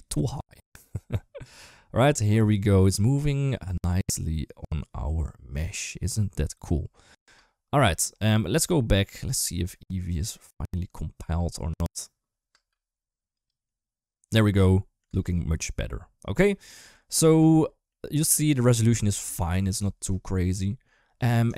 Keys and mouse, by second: 11.2 space, 13.1 space, 13.3 click, 14.4 middle click, 14.9 space, 16.3 middle click, 17.2 space, 17.7 middle click, 19.0 middle click, 19.7 shift+middle click, 20.4 middle click, 21.4 shift+middle click.